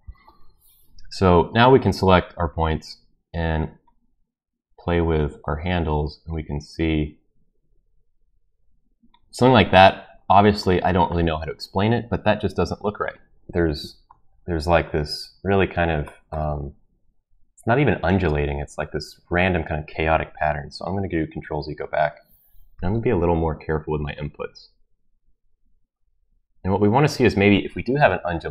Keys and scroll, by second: 21.2 ctrl+z.